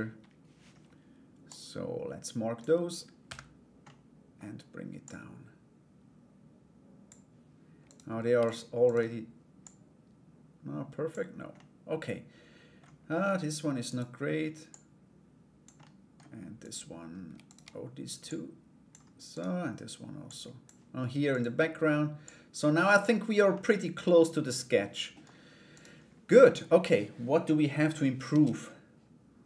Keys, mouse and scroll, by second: 1.0-2.2 drag, 3.4 middle click, 4.6-7.4 drag, 7.4 right click, 8.0 shift+right click, 8.4 shift+right click, 9.2-11.1 drag, 11.1-12.3 middle drag, 12.3 scroll down 1, 13.5 right click, 14.2-15.3 drag, 15.3 middle click, 16.2 right click, 17.0 shift+right click, 17.8-18.9 drag, 18.9 right click, 19.8 click, 20.9 right click, 21.8 click, 23.1-24.8 middle drag, 25.3 right click, 25.9 middle click.